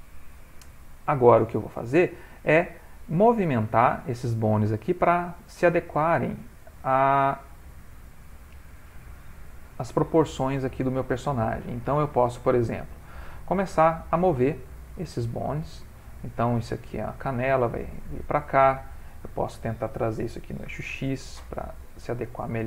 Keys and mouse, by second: 2.6 click, 5.2 ctrl+middle click, 10.7 ctrl+middle click, 11.9 g, 13.8 click, 14.1 g, 15.7 click, 16.1 g, 18.7 click, 20.2 g.